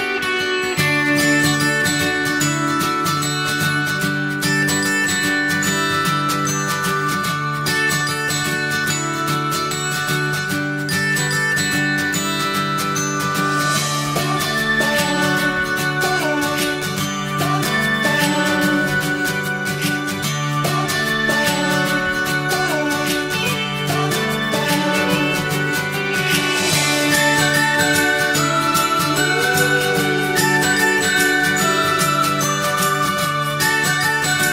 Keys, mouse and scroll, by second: 0.0 click, 0.7 click, 1.8 middle click, 2.3 scroll down 1, 3.1 shift+click, 3.5 alt+middle click, 3.7 alt+middle click, 4.8 click, 5.3 click, 5.6 middle click, 6.4 shift+a, 7.0 scroll down 1, 7.2 middle click, 7.4 s, 8.1 scroll down 1, 8.2 middle click, 8.4 s, 8.9 middle click, 9.1 s, 10.1 click, 10.4 middle click, 10.8 shift+scroll up 1, 11.1 middle click, 11.5-11.9 scroll up 1, 11.9-13.7 shift+middle drag, 13.7 click, 15.3-16.3 drag, 16.3 scroll up 1, 16.5-17.5 shift+middle drag, 17.5 click, 19.4-21.6 drag, 22.4 click, 23.8 click, 26.9 click, 27.2 click, 28.9 click, 29.3-29.6 scroll up 1, 29.9 middle click, 30.4 shift+a, 32.3 scroll down 2, 32.5-34.3 middle drag, 34.3 n.